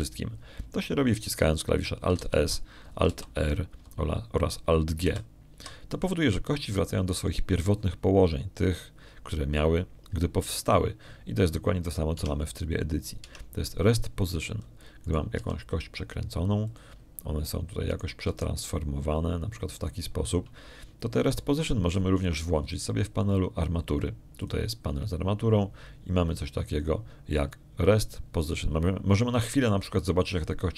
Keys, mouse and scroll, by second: 4.0 alt+s, 4.9 alt+r, 6.9 alt+g, 14.0 Tab, 15.1 Tab, 16.9 right click, 17.2 r, 18.5 click, 19.8 right click, 20.1 s, 21.6 click, 23.5 middle click, 26.3 click, 27.7-29.2 middle drag.